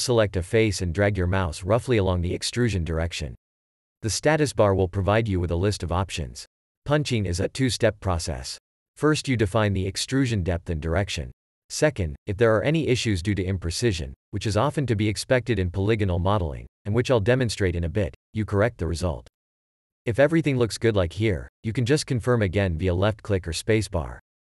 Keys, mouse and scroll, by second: 0.4 click, 3.5 shift+e, 12.1 click, 20.9 space.